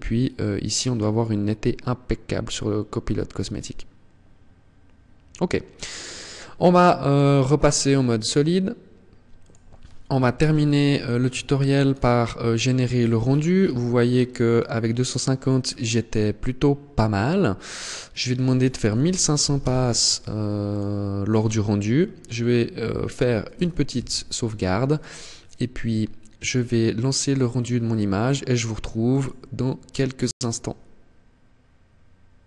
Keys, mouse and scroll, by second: 6.1 click, 7.1 click, 9.4 ctrl+s, 10.9 click, 12.0-14.6 scroll down 11, 14.6-16.2 scroll down 1, 16.2 scroll down 1, 16.6 click, 20.3-22.5 scroll up 13, 22.9 ctrl+s, 28.1 click.